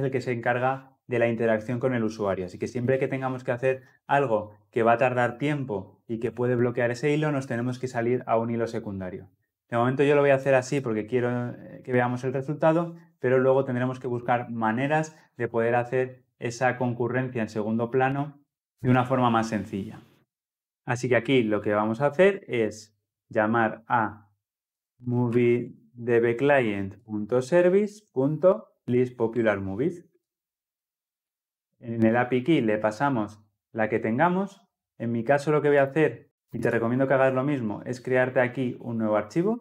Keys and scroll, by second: 26.5 Return, 28.0 Return, 30.0 ctrl+p.